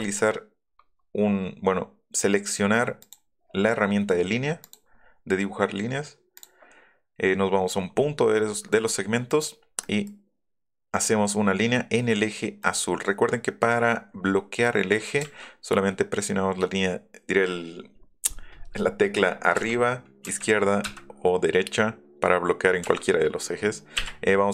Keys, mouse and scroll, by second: 3.0 click, 4.6 click, 6.3 click, 9.3 click, 12.6 click, 13.7-14.7 middle drag, 15.2 Up, 19.5 Up, 20.3 Left, 22.8 Left, 23.9 Up.